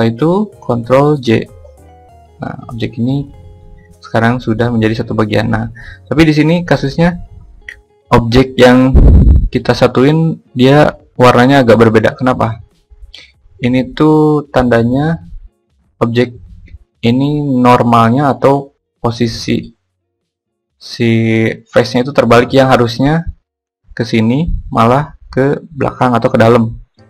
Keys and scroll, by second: 0.4 ctrl+j.